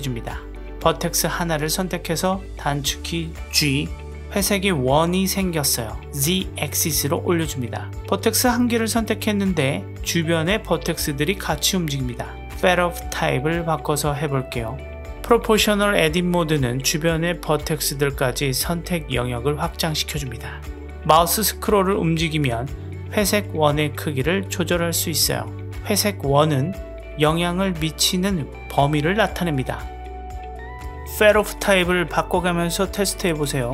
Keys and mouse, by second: 1.5 middle click, 2.7 click, 3.6 g, 8.3 z, 8.4 z, 8.5 z, 8.5 z, 8.8-10.8 middle drag, 12.0-13.4 drag, 13.5 click, 14.4 click, 15.2 g, 28.5-29.9 middle drag, 30.2-31.3 drag, 32.2 g.